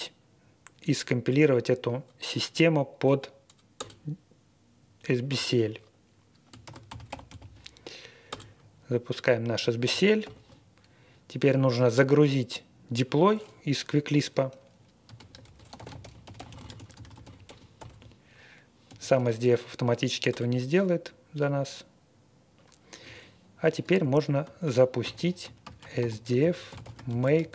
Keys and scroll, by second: 3.7 Return, 6.6 ctrl+r, 7.2 ctrl+r, 7.3 ctrl+r, 8.2 Return, 10.2 shift+9, 14.8-18.8 typing, 20.2 Return, 25.0-27.5 typing.